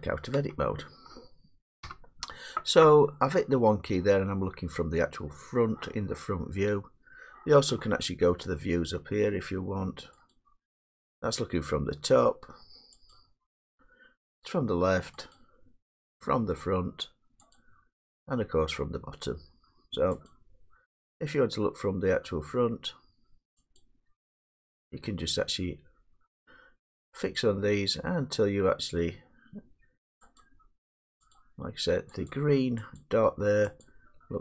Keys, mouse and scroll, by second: 0.3 Tab, 1.8 1, 10.3 click, 13.1 click, 15.4 click, 17.9 click, 20.3 click, 23.8 click, 27.3 click, 30.4 click, 31.3 click, 32.3 click, 33.0 click, 33.8 click.